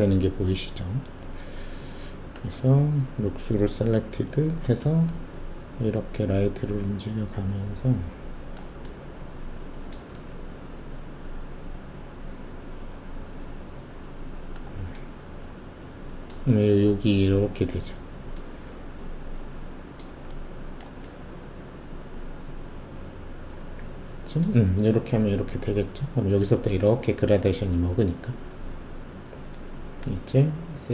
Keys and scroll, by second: 4.1 alt+shift+z.